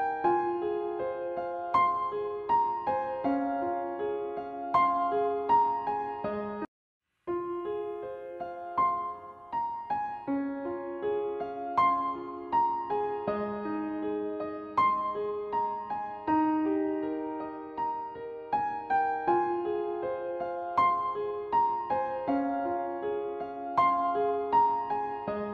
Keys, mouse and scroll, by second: 1.9-4.1 drag, 6.2 click, 7.5 click, 9.2 click, 10.5 click, 13.4 click, 14.8-16.3 drag, 17.3-19.0 drag, 19.2 click, 20.6 click, 22.1 click, 23.7 click.